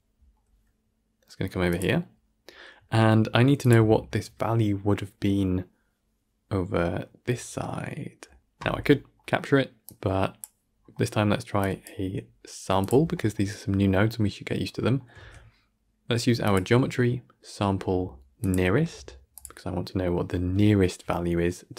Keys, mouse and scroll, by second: 9.7-11.7 drag.